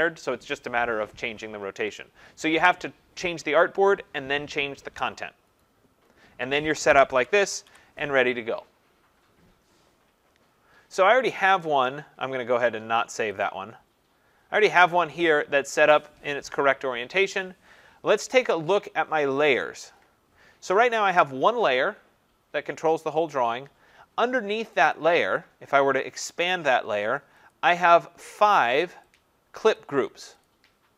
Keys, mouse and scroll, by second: 7.3 shift+click, 7.7 ctrl+0, 11.3 click, 13.4 click, 19.6 click, 24.9 click, 27.5 click, 28.5 click, 29.1 click, 29.7 click, 30.4 click.